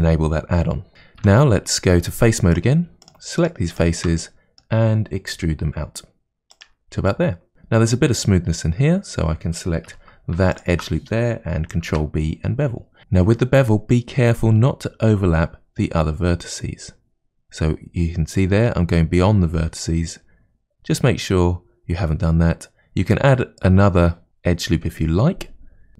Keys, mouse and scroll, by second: 1.2 3, 2.5 click, 3.1 shift+click, 3.4 shift+click, 3.7 shift+click, 4.2-5.3 middle drag, 5.3 e, 7.1 shift+middle click, 9.9 2, 10.5 alt+click, 11.9 ctrl+b.